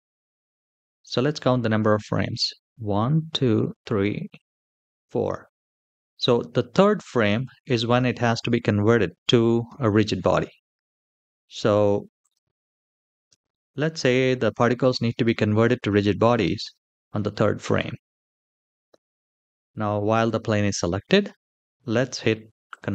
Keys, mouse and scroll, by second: 2.5 Right, 2.9 Right, 3.5 Right, 4.6 Right, 5.3 Left, 7.3-8.0 middle drag, 11.9-16.5 drag, 22.4 click.